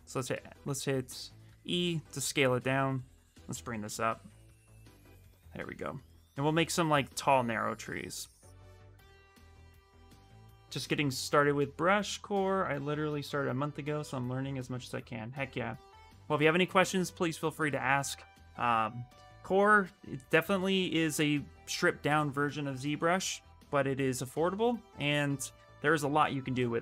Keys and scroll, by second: 0.4 e, 5.4 space, 7.9 space.